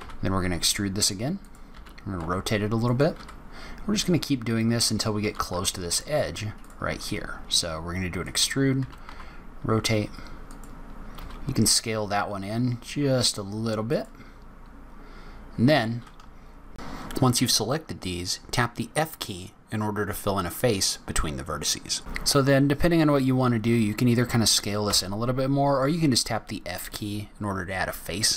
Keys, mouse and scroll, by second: 1.6 r, 3.1 e, 5.1 r, 6.8 e, 8.7 r, 11.1 s, 16.7 shift+click, 18.2 f, 18.8-19.4 scroll down 2, 19.4-20.8 scroll up 1, 20.8-21.2 scroll up 1, 22.7 scroll up 1, 24.8 f, 25.6-26.2 scroll down 4.